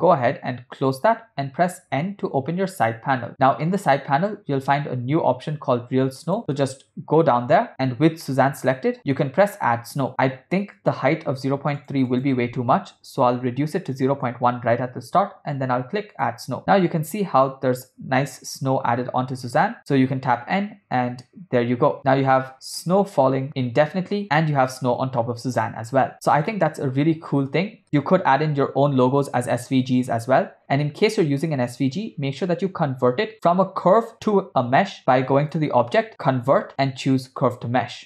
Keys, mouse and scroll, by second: 1.9 n, 6.3 click, 11.8-14.2 drag, 16.1 click, 19.8 n, 20.8 space, 22.7 space, 25.1 space, 26.5-27.5 ctrl+middle drag, 27.8 space, 35.5-38.0 drag.